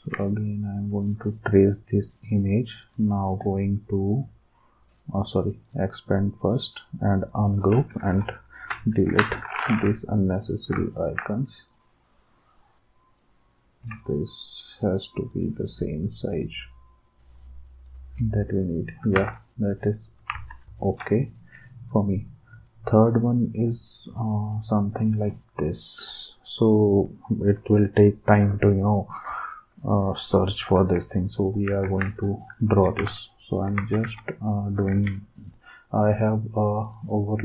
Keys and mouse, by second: 9.1 Delete, 19.2 alt+Tab, 20.3 alt+Tab, 31.8 ctrl+s, 32.9 alt+Tab, 33.8 alt+Tab.